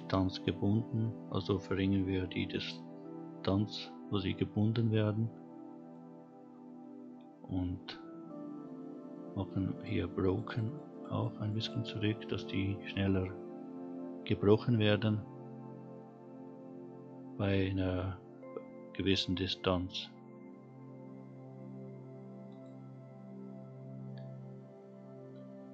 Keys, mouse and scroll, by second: 1.9-5.9 drag, 7.4-8.1 scroll down 2, 9.7 click, 10.2 click, 10.4 click, 10.6 click, 10.9 click, 11.1 click, 11.4 click, 11.6 click, 22.5 click, 24.0-24.4 scroll down 2, 24.6 scroll up 2.